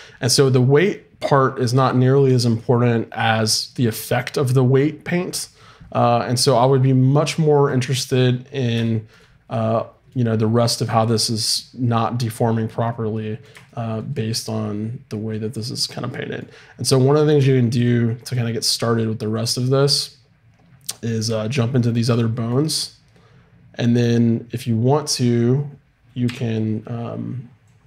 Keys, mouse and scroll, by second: 7.7-9.8 middle drag, 19.4-21.8 drag, 26.3 t.